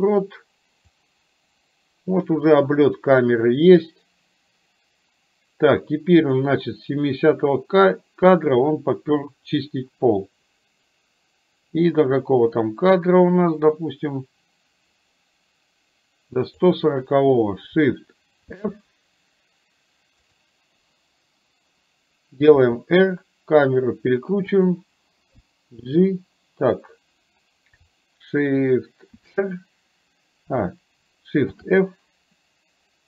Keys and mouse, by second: 1.1-16.6 drag, 18.6 shift+f, 25.5 Right, 29.2 shift+r, 31.6 shift+f.